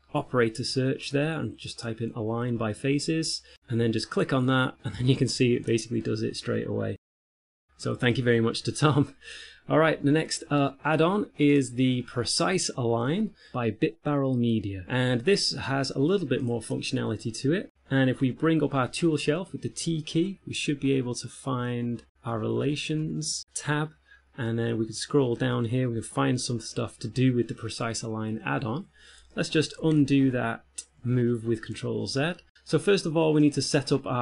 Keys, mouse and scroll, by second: 6.2 middle click, 8.4 middle click, 19.2 t, 21.1-22.2 ctrl+scroll up 2, 22.5-24.8 ctrl+scroll up 2, 24.8-26.1 scroll down 8, 29.6 shift+middle click, 30.7 ctrl+z.